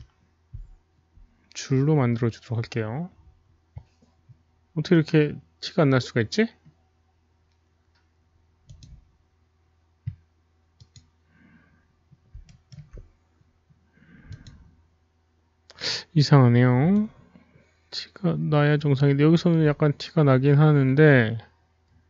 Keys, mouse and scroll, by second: 4.9 click, 4.9 scroll down 1, 7.4-8.6 scroll up 1, 8.6 Return, 8.6 Tab, 8.6 KP_1, 8.6 KP_Decimal, 8.6 click, 9.9 Return, 9.9 KP_1, 9.9 KP_Decimal, 10.7 click, 12.9 alt+middle click, 12.9 click, 13.5-14.3 middle drag, 16.4 click, 16.4 alt+middle click, 17.0 alt+click, 17.0 alt+middle click, 20.3 middle click, 21.4 alt+click, 21.4 alt+middle click.